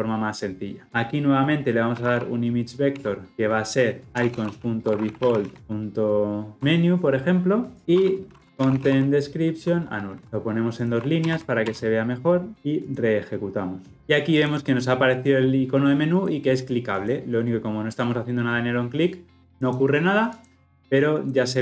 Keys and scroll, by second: 2.9 Return, 12.8 shift+F10.